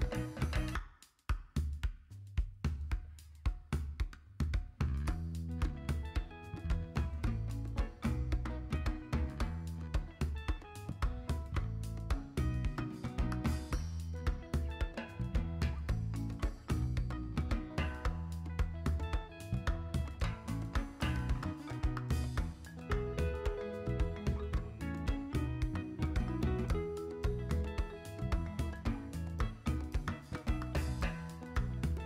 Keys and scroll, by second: 2.0 Tab, 12.9 z, 21.2 b.